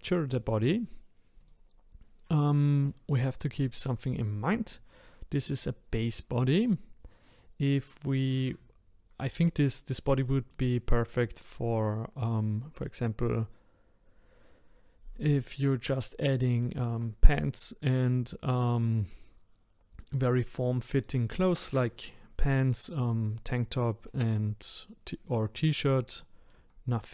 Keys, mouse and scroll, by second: 1.4 click, 10.2-13.3 shift+middle drag, 15.7-16.6 scroll up 1, 16.6-19.6 shift+middle drag, 26.2-27.1 shift+middle drag.